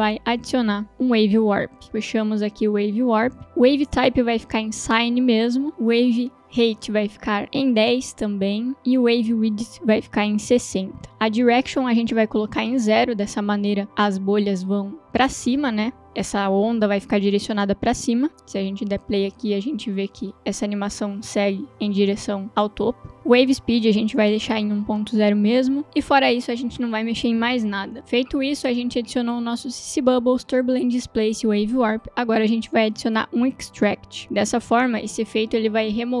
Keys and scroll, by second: 0.8 ctrl+space, 1.5-2.5 typing, 2.6 Down, 2.8 Up, 3.3 Return, 11.1 Return, 12.9 0, 13.1 Return, 18.8 space, 34.0 ctrl+space, 34.2 t, 34.3 Down, 34.6 Return.